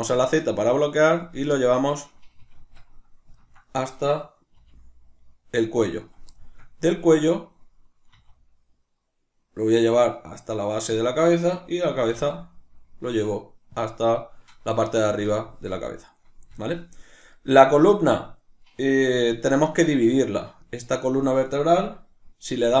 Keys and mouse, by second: 1.3 click, 1.5-6.1 shift+middle drag, 2.5 alt+o, 4.5 g, 6.1 click, 6.4 shift+middle click, 7.1 right click, 8.2 e, 11.0 click, 11.4-13.8 shift+middle drag, 12.0 e, 13.8 click, 14.8-17.2 shift+middle drag, 17.2 right click, 20.6-22.8 shift+middle drag.